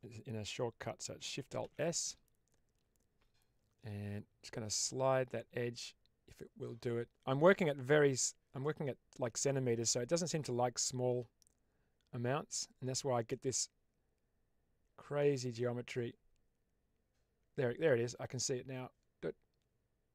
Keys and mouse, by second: 1.5 alt+shift+s.